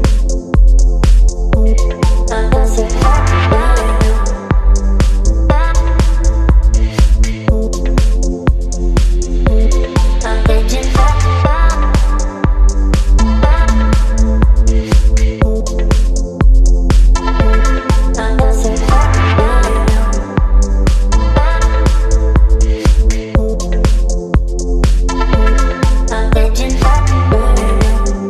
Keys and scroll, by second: 1.4 space, 1.9 t, 4.3 w, 5.3-7.8 typing, 6.4 Return, 8.7 ctrl+a, 24.4 v, 25.1 space, 27.1 space.